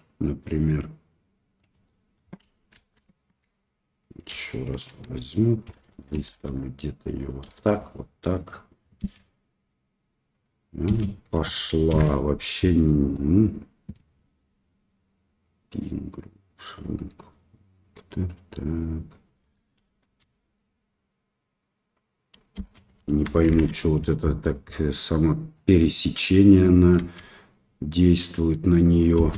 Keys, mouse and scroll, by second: 1.8-2.2 middle drag, 2.8 ctrl+z, 4.3 KP_1, 4.9 KP_3, 5.9 shift+middle drag, 6.3 r, 7.5 g, 9.0 space, 10.9 space, 11.9 shift+Left, 19.4 click, 20.0 space, 23.5 shift+Left, 23.5 space, 25.6-26.7 drag, 27.0 space.